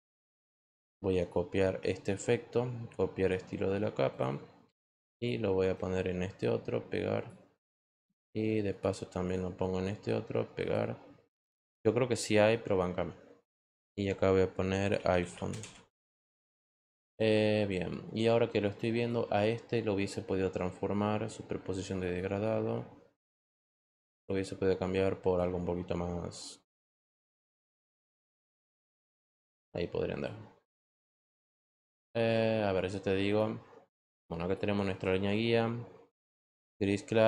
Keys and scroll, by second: 14.6-16.1 typing.